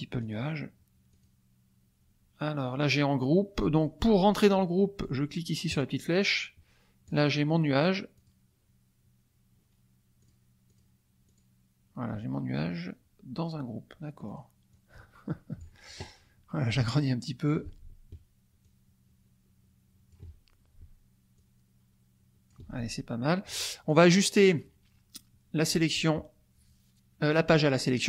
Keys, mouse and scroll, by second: 0.3 click, 1.2 click, 5.7 click, 7.1 click, 8.1 click, 10.2 click, 10.6 click, 11.3 click, 14.2 click, 14.7-15.8 drag, 16.7-17.7 ctrl+drag, 18.6-20.3 ctrl+drag, 21.3-22.6 ctrl+drag, 22.7 ctrl+click, 23.9 click.